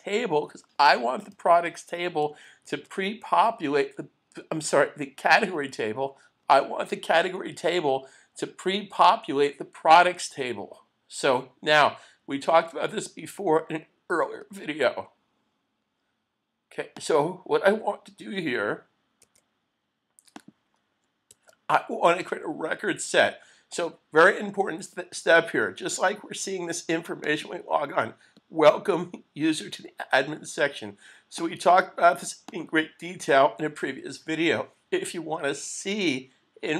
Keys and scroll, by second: 2.8 super+s, 21.3 super+s.